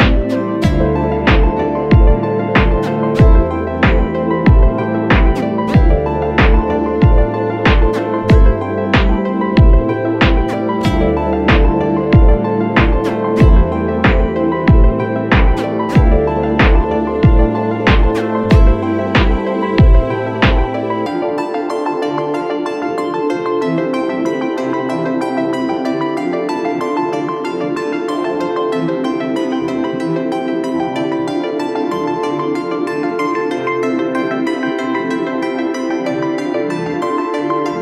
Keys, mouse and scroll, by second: 3.3 alt+click, 6.3 ctrl+j, 24.5 right click, 29.4 ctrl+i, 32.1 double click, 33.3 double click.